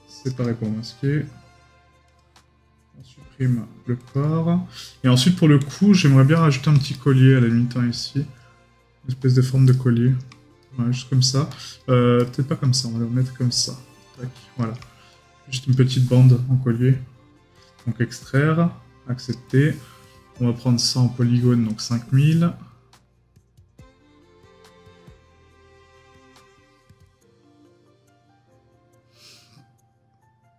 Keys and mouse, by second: 6.3 right click, 10.6 right click.